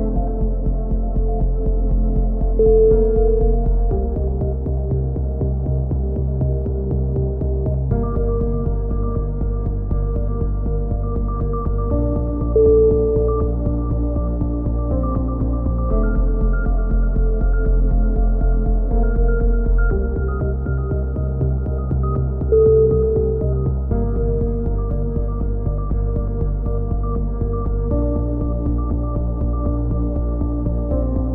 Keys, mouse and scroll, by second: 0.4 z, 4.9 middle click, 5.6 KP_3, 5.9 z, 6.2-8.3 drag, 8.3-14.2 middle drag, 19.7 middle click, 20.3-22.5 drag, 21.1 z, 23.2 ctrl+r, 24.1 a, 24.4 click, 25.5 middle click, 26.3 KP_3, 26.7 z, 26.9 click, 27.9 middle click, 28.4-29.4 drag, 29.4 middle click.